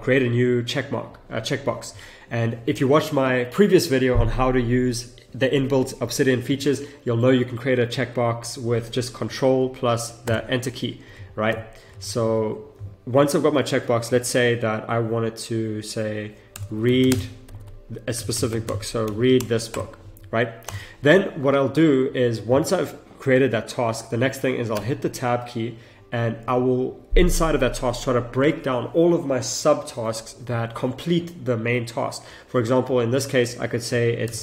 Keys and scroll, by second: 10.2 ctrl+Return, 12.2 ctrl+z, 17.0 space, 19.4 BackSpace, 19.7 Return, 24.7 Return, 24.8 Tab, 29.8 Tab, 33.8 Tab, 34.2 shift+r.